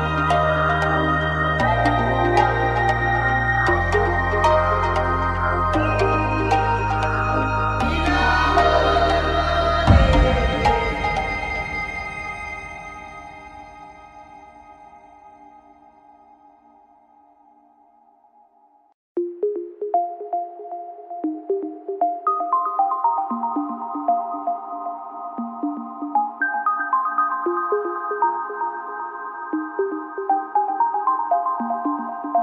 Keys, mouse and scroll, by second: 2.4-7.7 right drag, 5.0 f, 5.3 a, 7.6 f, 7.7 a, 7.7 click, 9.2-12.8 drag, 12.0 f, 12.3 a, 12.8 middle click, 13.5 middle click, 13.7 click, 13.7-15.9 right drag, 15.6 f, 15.7 a, 16.2-17.7 right drag, 18.4 right click, 19.1 f, 19.2 click, 19.2 a, 19.8-22.1 drag, 20.4 right click, 20.9 right click, 21.2 w, 22.2 a, 25.9-26.9 drag, 26.5 w, 27.1 a, 29.2-31.1 right drag, 30.1 click, 32.0 right click, 32.0 f, 32.0 a.